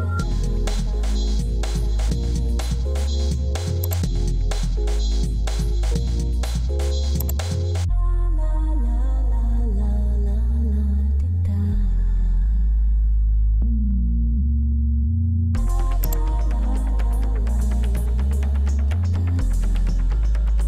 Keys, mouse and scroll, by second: 4.5 Escape, 6.6 alt+n, 14.2 alt+n.